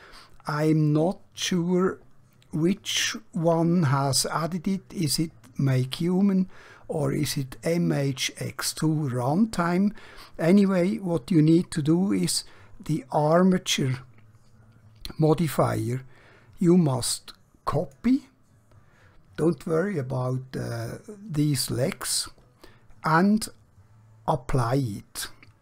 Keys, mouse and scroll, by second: 17.7 click, 24.4 click.